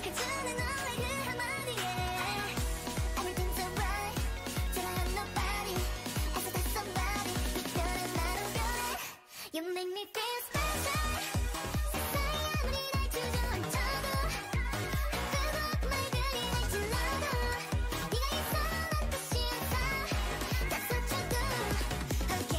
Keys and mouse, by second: 1.2 g, 5.4-10.4 right drag, 5.6 g, 7.8 g, 9.3 g, 10.6 g, 14.1 e, 18.2 e, 19.1 e.